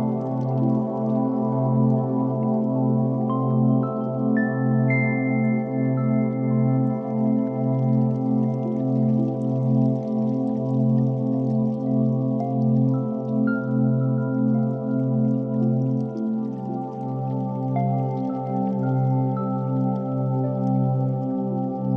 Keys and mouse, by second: 2.0 click, 3.1 ctrl+KP_1, 4.0 s, 6.4 KP_1, 7.4 g, 12.8-16.5 middle drag, 16.9 click, 18.6 s, 20.7 Tab, 21.3 alt+z, 21.7 alt+z.